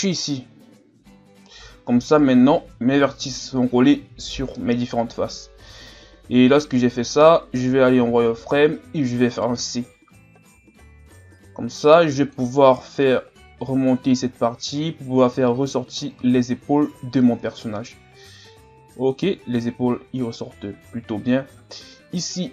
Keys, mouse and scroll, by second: 0.2 click, 1.3 Tab, 2.1 scroll up 2, 5.8-6.8 scroll up 1, 6.8-7.7 scroll down 2, 7.7 scroll up 1, 8.0 z, 8.5-9.4 scroll up 1, 9.4 right click, 9.7 c, 13.0-16.1 drag, 16.2 z, 16.6 scroll down 3, 16.9 Tab, 18.1-19.6 scroll up 2, 19.7 Tab, 22.1 right click.